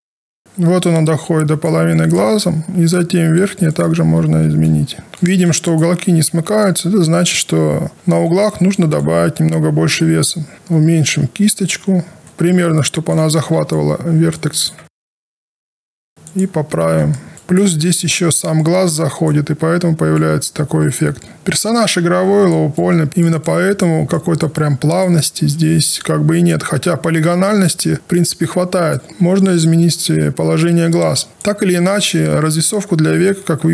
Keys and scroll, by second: 10.5 b, 25.3 w.